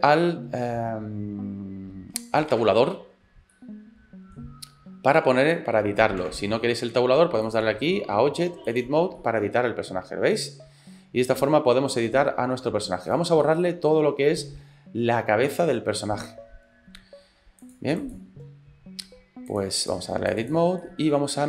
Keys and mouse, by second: 2.6 Tab, 3.6 middle click, 5.4 shift+middle click, 6.3 Tab, 7.6-8.9 drag, 9.2-12.9 middle drag, 13.1-16.3 middle drag, 17.6 click, 19.5-20.6 drag, 20.8 middle click.